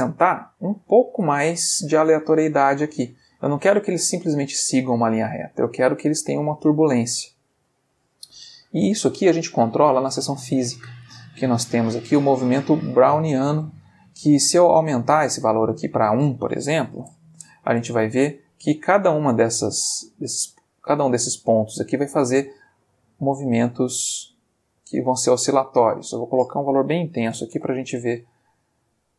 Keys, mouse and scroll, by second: 0.4-1.1 ctrl+middle drag, 1.2 ctrl+space, 4.9 space, 5.1-5.7 middle drag, 7.1-7.7 ctrl+middle drag, 8.4 middle click, 9.5 click, 14.6 click, 15.3 Escape, 15.8 click, 16.9 1, 17.0 Return, 17.7 space, 23.0 click, 24.0 click, 24.7 click, 25.9 ctrl+click, 27.2 1, 27.3 0, 27.6 Return.